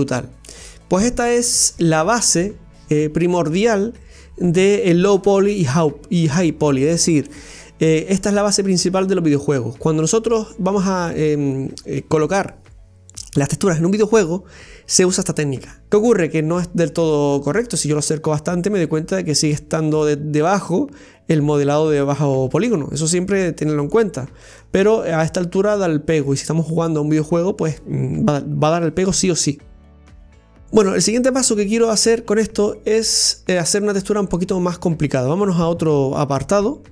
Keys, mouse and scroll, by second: 17.0-17.6 scroll up 1, 17.6-18.0 scroll up 1, 21.1-21.5 scroll down 2, 21.5-24.1 middle drag, 24.1-24.6 scroll down 1, 24.6-26.5 middle drag, 26.5-26.9 scroll down 1, 26.9-36.9 middle drag.